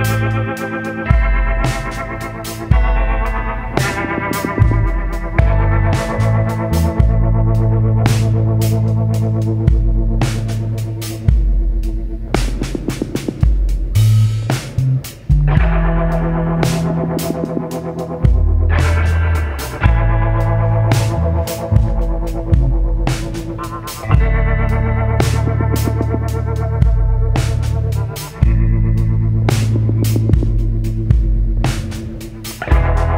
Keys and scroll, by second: 2.8 ctrl+z, 4.0 ctrl+z, 4.3 ctrl+z, 15.6 ctrl+z, 26.3 ctrl+z, 30.3 ctrl+z, 30.7 ctrl+z.